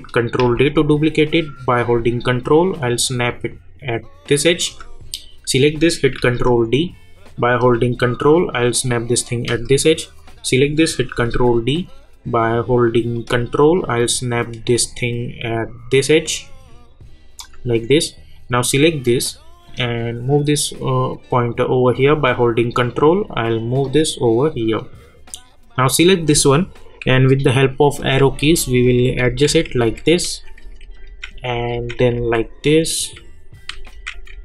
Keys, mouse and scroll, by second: 0.4 ctrl+d, 1.7-5.2 drag, 6.2 ctrl+d, 7.6-10.2 drag, 11.1 ctrl+d, 13.1-24.5 drag, 28.0 Right, 30.3 Down.